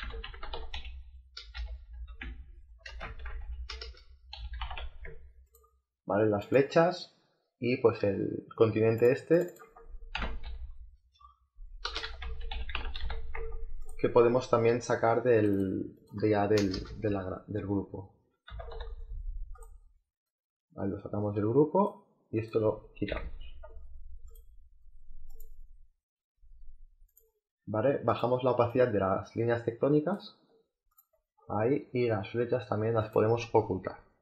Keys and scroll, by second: 0.2 e, 1.3-4.3 typing, 10.1 c, 11.8-12.7 typing, 16.5 BackSpace, 18.4 n, 23.0 Delete.